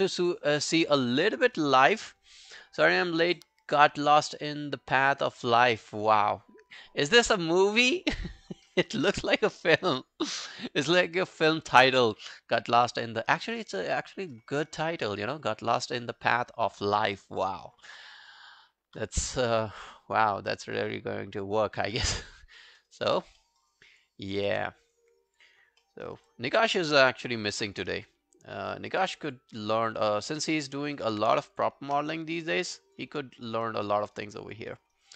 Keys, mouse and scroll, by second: 22.6 alt+middle click, 22.8 alt+right click, 23.4 alt+middle click, 23.6 alt+right click, 23.9 alt+click, 25.3 double click, 25.6 scroll down 2, 25.8 alt+middle click, 26.1 alt+right click, 26.3 alt+click, 27.0 alt+middle click, 27.2 alt+right click, 27.7 q, 27.9 right click, 29.6 scroll down 2, 29.8 alt+click, 30.3 alt+right click, 30.6 alt+middle click, 30.8 alt+right click, 31.0 alt+click, 31.6 shift+click, 32.9 double click, 33.2 scroll down 2, 33.4 alt+click, 33.7 alt+right click, 33.9 alt+click, 34.2 alt+right click, 34.4 alt+click, 34.7 alt+middle click, 35.0 alt+right click.